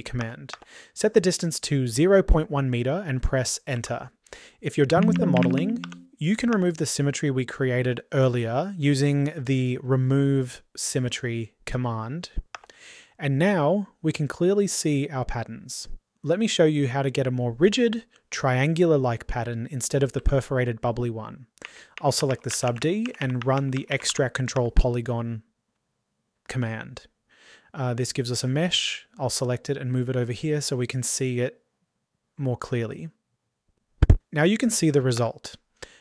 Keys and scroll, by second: 8.2 typing, 24.5 typing.